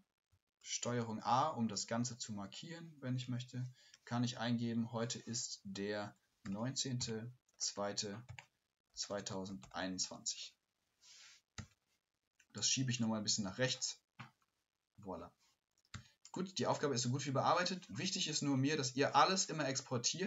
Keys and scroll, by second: 0.3 shift+Left, 0.6 ctrl+a, 3.2 ctrl+a.